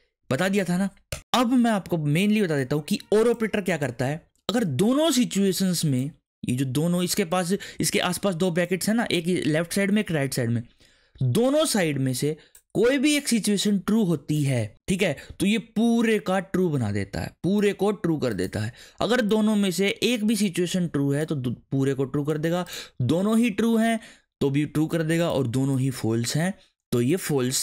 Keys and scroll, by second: 1.1 Return.